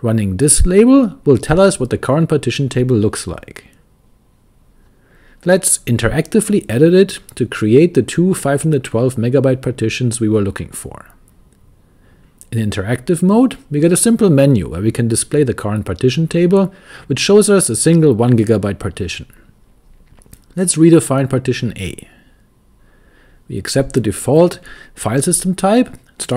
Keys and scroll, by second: 0.0-1.5 typing, 5.6-9.0 typing, 11.1 typing, 14.3-14.9 typing, 18.6 a, 19.2 Return, 21.6 Return, 24.8 Return, 26.2-26.3 typing.